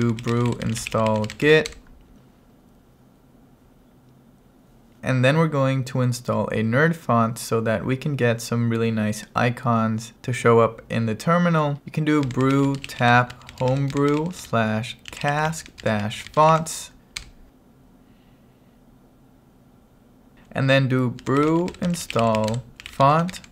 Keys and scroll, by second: 0.0-1.9 typing, 11.8 ctrl+1, 12.0-16.7 typing, 17.3 Return, 21.0-23.5 typing.